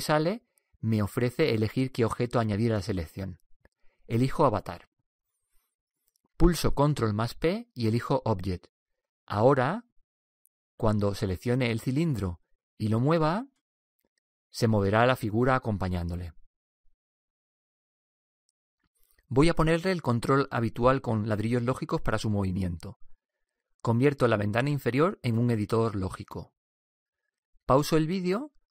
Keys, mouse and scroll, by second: 0.5-4.0 right drag, 7.4 ctrl+p, 10.7-14.3 right drag, 13.8 g.